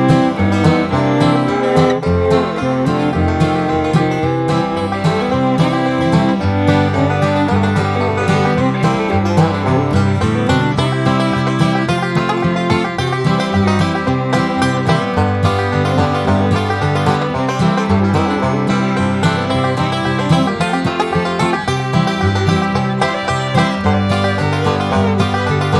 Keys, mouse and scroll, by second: 1.5 right click, 2.7 click, 4.0 scroll down 1, 4.8-5.9 drag, 6.0 click, 6.6-6.9 scroll up 2, 8.1 click, 9.8 click, 12.6 click, 14.1 click, 15.2 click, 15.9 Escape, 16.3 click, 17.5 click, 18.3 Delete, 18.8 scroll down 1, 20.9 click, 22.9 click, 24.1-24.8 scroll down 4.